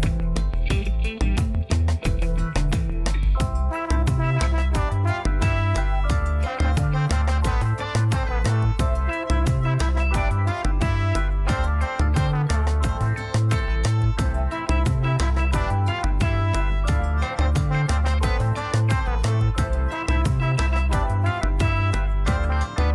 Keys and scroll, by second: 1.7 ctrl+b, 5.3 i, 10.6 Tab, 18.0 alt+a.